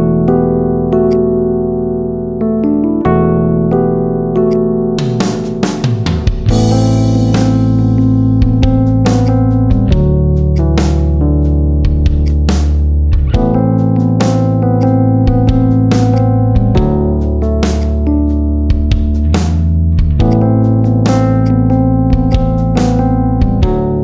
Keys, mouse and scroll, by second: 0.1-0.9 middle drag, 0.9 alt+shift+click, 1.4 scroll up 1, 1.7 shift+middle click, 1.9 scroll up 1, 2.2 shift+middle click, 2.8 ctrl+b, 4.5 scroll up 2, 4.7-6.0 shift+middle drag, 6.0 scroll down 2, 6.2-7.4 middle drag, 7.4 Tab, 7.6 scroll down 2, 7.7-8.6 middle drag, 8.6 KP_7, 9.1 drag, 9.8 shift+s, 11.1 shift+a, 12.3-12.9 middle drag, 12.9 KP_1, 13.7 s, 14.9 s, 16.3 g, 18.0 scroll up 2, 18.2-19.4 shift+middle drag, 19.4 s, 21.9 ctrl+a, 22.3 scroll up 2, 22.5 shift+middle click, 23.1 /, 23.7 Tab.